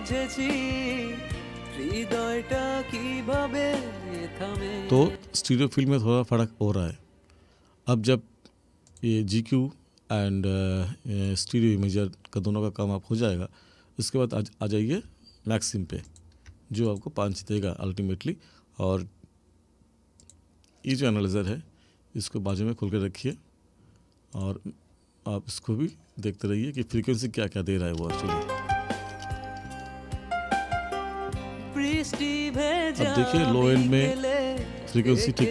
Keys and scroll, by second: 5.1 space, 28.0 space.